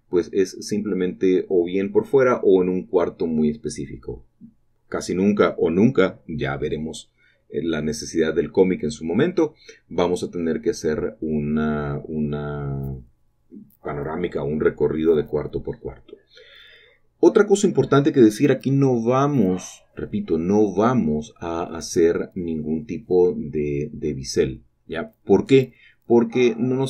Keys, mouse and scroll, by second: 1.2 shift+click, 1.8 shift+middle click, 2.7-3.0 scroll up 1, 3.8 click, 4.4 typing, 5.4 click, 5.7 typing, 7.3 shift+click, 7.7-8.2 typing, 10.0 shift+click, 10.2 typing, 12.1 shift+click, 12.3 typing, 13.2 click, 14.1 shift+click, 14.5 typing, 15.0 click, 15.2-15.7 scroll down 1, 16.4 scroll down 1, 16.5 shift+middle click, 17.4 shift+middle click, 18.4 scroll up 2, 19.8 click, 20.1 shift+click, 20.8-21.5 typing, 23.0 shift+click, 23.0 typing, 25.0-25.6 scroll down 3, 25.8 shift+middle click, 26.1 typing.